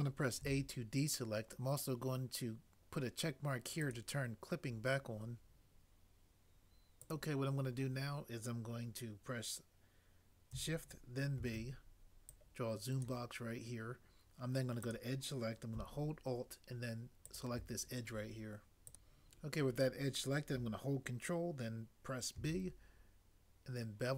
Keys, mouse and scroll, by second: 0.4 a, 11.4 b, 22.3 ctrl+b.